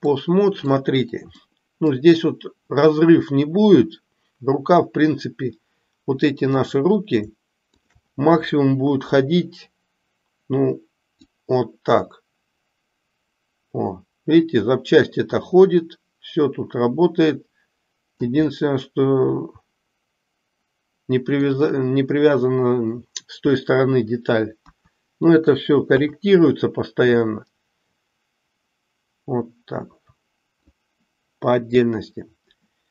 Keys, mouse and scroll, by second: 0.1 middle click, 1.5 middle click, 6.6 click, 11.4-18.4 drag, 18.6-21.5 middle drag, 27.1-30.8 drag.